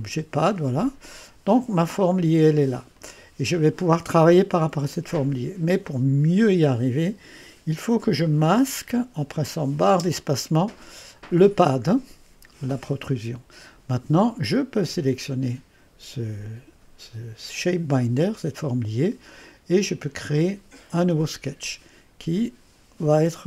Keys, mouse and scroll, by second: 0.0 click, 1.8 click, 3.0 click, 8.3 click, 9.9 space, 14.9 click, 20.3 click.